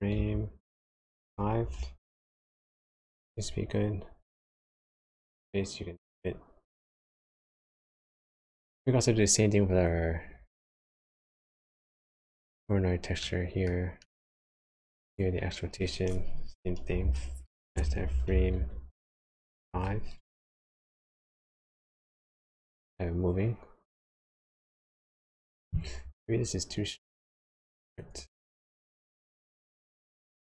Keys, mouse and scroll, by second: 4.8 space, 8.5 space, 9.8 click, 10.8 middle click, 12.3-13.2 scroll up 6, 13.2 middle click, 14.0 middle click, 14.7-15.0 scroll down 1, 15.0 click, 20.8 space, 24.7 space, 26.7 shift+click, 28.6 space, 30.3 space.